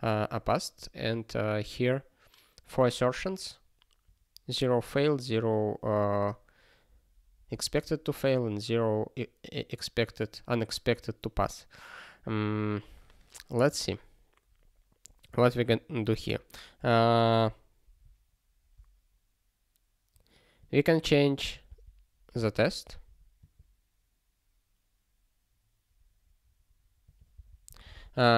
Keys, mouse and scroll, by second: 16.1 click, 16.2 click, 20.6 click, 21.7 ctrl+d, 22.4 ctrl+s, 23.4 click, 27.3 c, 27.9 ctrl+s.